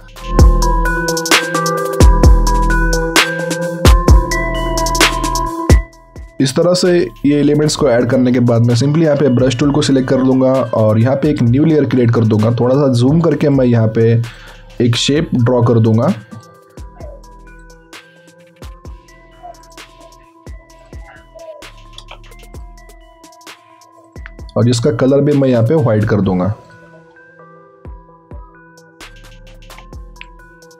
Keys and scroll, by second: 0.1 alt+Tab, 0.8 ctrl+c, 0.9 alt+Tab, 1.1 ctrl+v.